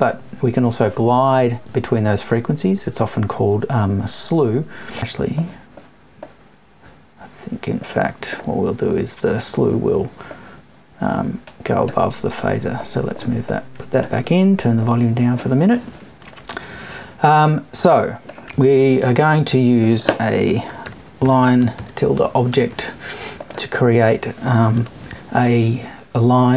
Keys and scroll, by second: 24.7 BackSpace.